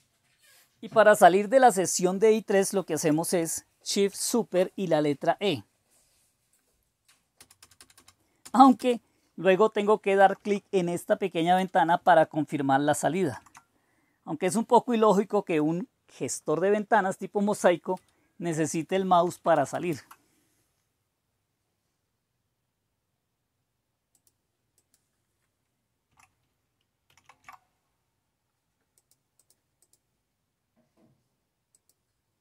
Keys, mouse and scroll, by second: 12.5 Caps_Lock, 12.5 Return, 13.2 typing, 24.1-29.1 drag, 29.3-32.1 drag.